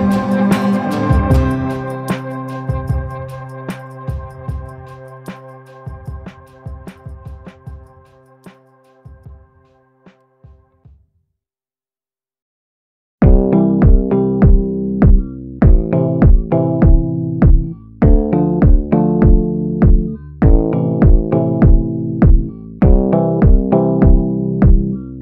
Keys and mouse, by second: 0.9-2.2 drag, 2.2 ], 2.5 ], 2.7 ], 4.2-4.7 [, 4.7 click, 5.2 ctrl+z, 5.2 ], 5.3 ], 5.4 click, 6.1 ctrl+z, 6.1 [, 6.3 click, 7.9 middle click, 9.5 ctrl+z, 10.0 middle click, 11.3 ], 11.4 ], 11.6 click, 12.2 ctrl+z, 12.6 click, 13.7 click, 13.7 [, 15.0 middle click, 16.8 [, 17.4 ctrl+z, 17.6 [, 17.8 click, 18.3 ctrl+z, 18.5 click, 19.4 ctrl+z, 19.5 ctrl+z, 19.9 click, 20.4 ctrl+z, 20.5 ], 20.6 click, 21.2 ctrl+z, 21.4 click, 23.0 click, 23.8 ctrl+z, 23.9 ctrl+z, 24.1 ], 24.2 ], 24.3 click, 24.8 ctrl+z, 25.0 click.